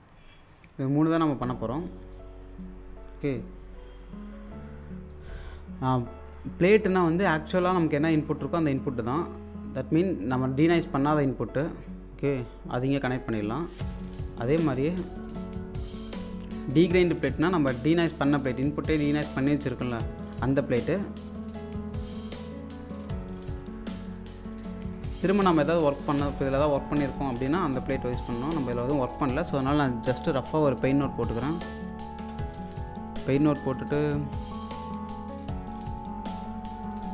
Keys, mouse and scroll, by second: 0.4 scroll down 1, 1.0-7.9 alt+drag, 8.5-9.0 scroll down 1, 9.0 scroll up 1, 9.2-24.9 drag, 27.3 space, 27.9-28.2 scroll down 1, 28.6 alt+click, 30.1 p, 30.7 click, 31.7 1, 32.2 space, 32.9 scroll down 1, 33.1 alt+click, 35.8-36.2 scroll up 1, 36.3 ctrl+click.